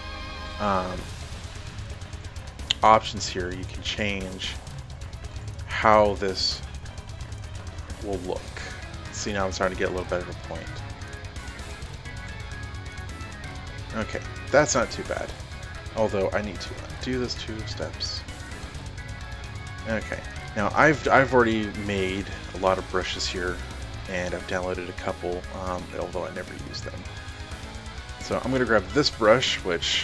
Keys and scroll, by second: 16.5 ctrl+alt+z.